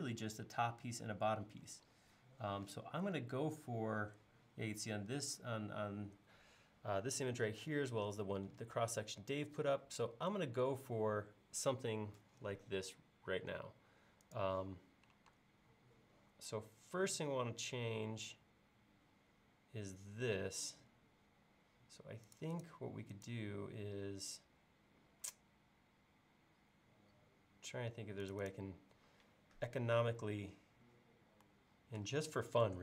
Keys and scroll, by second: 15.4 space.